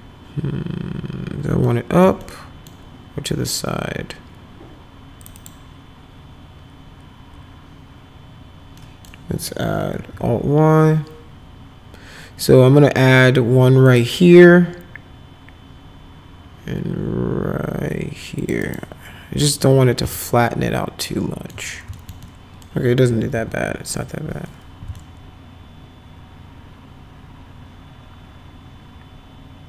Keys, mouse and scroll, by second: 1.6 alt+middle click, 2.2 middle click, 5.2 click, 5.4 click, 8.8 middle click, 10.0 alt+y, 13.9 click, 18.4 click, 18.6 right click, 19.4 click, 20.2-21.5 alt+right drag, 21.9 alt+right click, 22.2 middle click, 23.1 F5, 23.3 F4, 25.0-29.6 alt+middle drag.